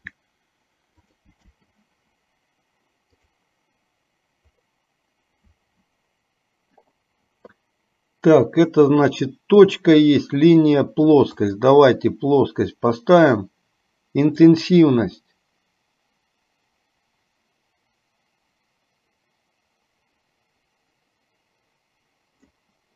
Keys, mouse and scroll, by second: 0.1 g, 1.7 space, 3.4 click, 9.3-11.9 drag, 14.6-22.7 drag.